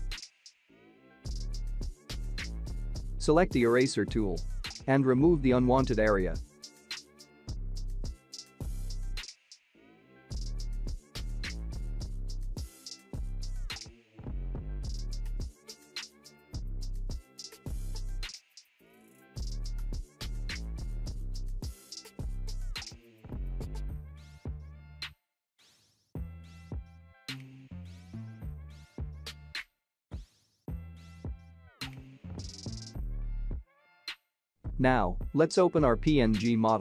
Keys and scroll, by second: 11.8 ].